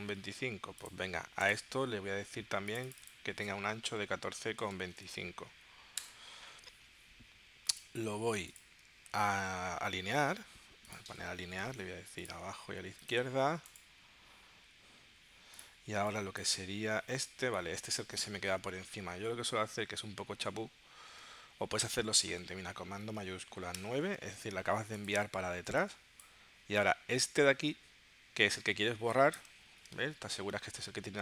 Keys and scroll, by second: 3.5-5.5 typing, 6.0 Return, 17.5 super+z, 23.7 shift+super+9, 30.2 super+y.